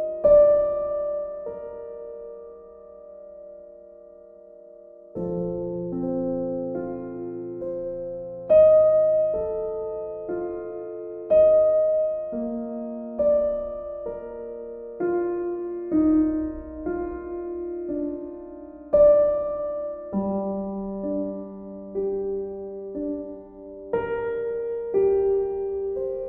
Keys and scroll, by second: 5.6 Delete, 6.5 Delete, 6.9 ctrl+d.